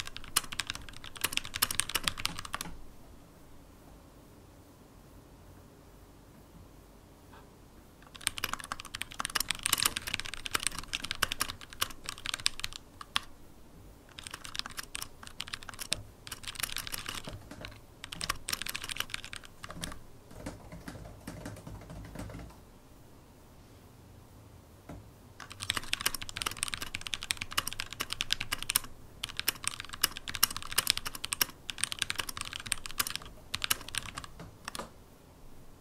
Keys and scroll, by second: 0.7 shift+super+d, 2.3 super+p, 2.7 super+p, 3.1 super+e, 9.2-11.8 typing, 15.8 super+n, 17.1-22.9 typing, 24.8 super+e, 33.2-35.8 typing.